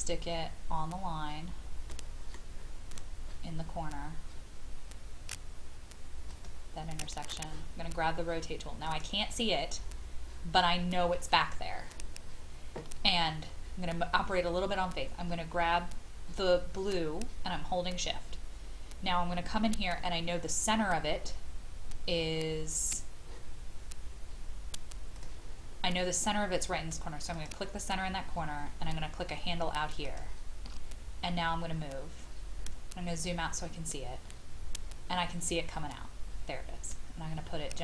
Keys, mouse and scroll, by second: 1.9 middle click, 3.7-5.1 scroll up 1, 6.3 click, 9.8-12.9 scroll down 1, 19.0-19.8 shift+scroll up 2, 27.3 shift+click, 30.0 shift+click, 31.4-33.6 scroll down 1, 37.7 click.